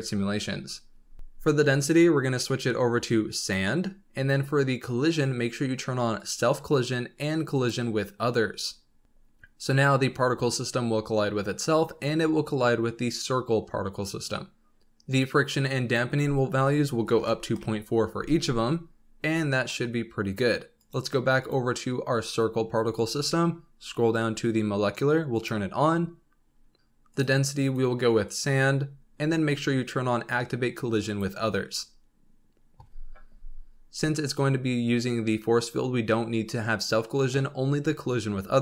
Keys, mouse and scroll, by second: 1.7 click, 2.4-4.1 drag, 4.1-5.7 scroll down 2, 6.1 click, 7.5 click, 8.5-10.0 scroll down 3, 15.6-18.7 drag, 19.2 scroll down 2, 19.6 middle click, 19.8 scroll up 2, 20.8 click, 21.4 click, 22.6-25.3 scroll down 36, 25.3 click, 26.4-27.1 scroll down 4, 27.1 click, 27.6-28.8 drag, 28.8-31.0 scroll down 3, 31.0 click, 31.6-33.2 scroll down 3.